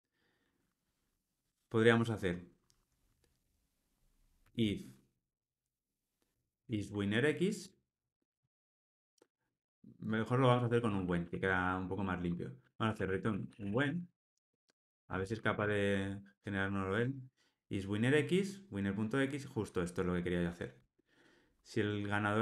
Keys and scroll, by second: 7.6 Return, 20.8 Tab.